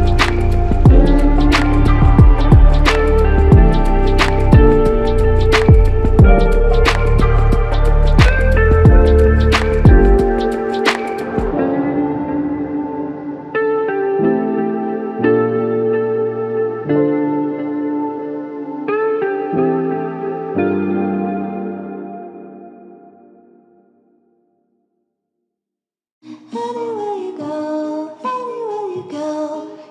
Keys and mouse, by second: 5.3 double click, 11.8 double click, 14.6 double click, 20.1 double click, 24.4 double click, 28.8 double click.